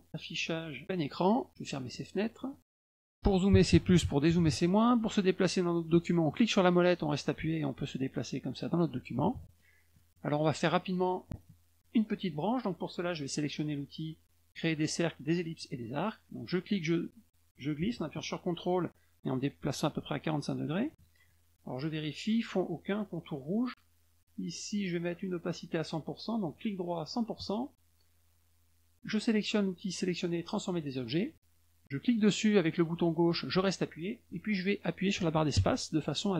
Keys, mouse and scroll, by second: 0.3 click, 1.5 middle click, 1.6 middle click, 1.8 middle click, 1.9 middle click, 2.1 middle click, 2.4 middle click, 2.8 middle click, 3.0 middle click, 6.3-8.6 middle drag, 9.9 middle click, 10.3 middle click, 10.7 middle click, 15.6 click, 16.5-20.8 drag, 26.4 right click, 27.0 click, 30.7 click, 32.2-36.3 drag.